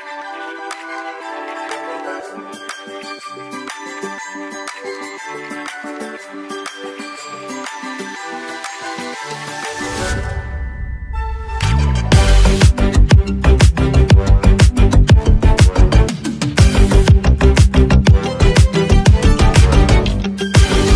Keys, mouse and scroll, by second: 0.2-0.6 alt+scroll up 1, 0.6 ctrl+s, 7.2-14.1 drag, 17.5 click.